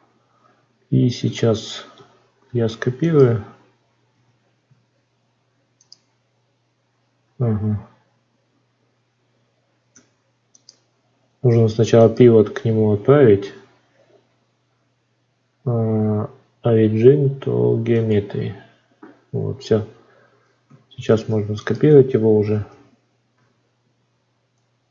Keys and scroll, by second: 2.3 shift+d, 7.3 ctrl+z, 20.9 shift+d.